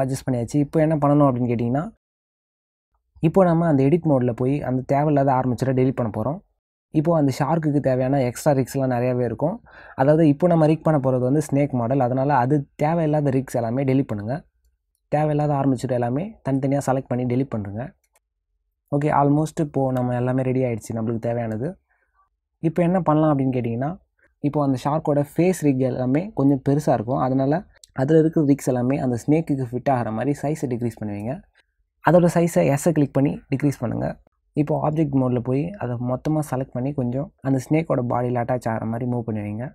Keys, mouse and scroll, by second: 3.6 click, 5.4 middle click, 10.2 click, 12.6 middle click, 15.1 Delete, 15.1 click, 15.3 middle click, 15.6 click, 16.1 click, 16.6 shift+click, 16.9 shift+click, 17.2 shift+click, 17.8 shift+click, 18.3 Delete, 18.6 click, 18.8 Delete, 19.1 middle click, 22.2 s, 23.1 click, 24.9 s, 28.0 middle click, 34.3 click, 34.9 click.